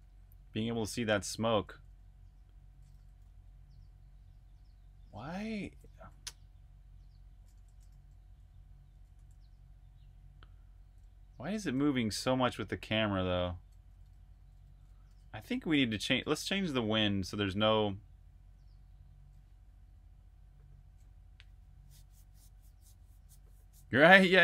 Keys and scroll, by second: 0.0-7.0 typing, 8.3-18.7 typing.